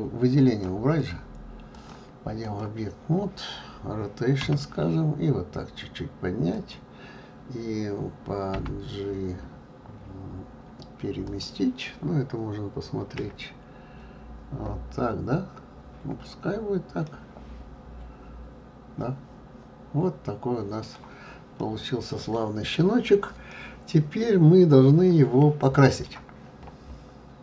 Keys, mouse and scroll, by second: 0.5 click, 1.0 click, 1.7-4.4 drag, 4.4 r, 8.5 g, 13.1 KP_1, 17.0-20.0 middle drag, 21.6-26.5 middle drag.